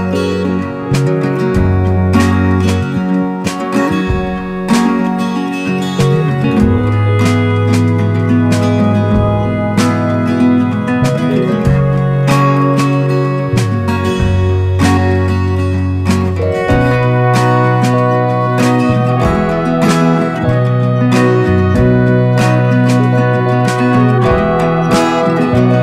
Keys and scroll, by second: 3.0 Return, 4.2 super+b, 22.6 Return.